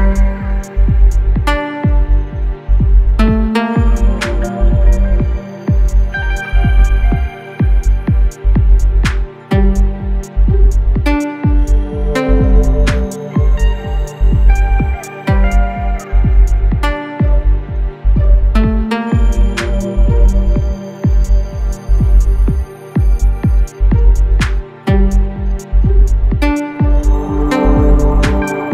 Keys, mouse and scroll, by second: 6.6 click, 10.6 click, 14.5 click, 16.3 click, 17.7 right click, 19.3 click, 22.1 click, 24.2 right click, 26.1 click.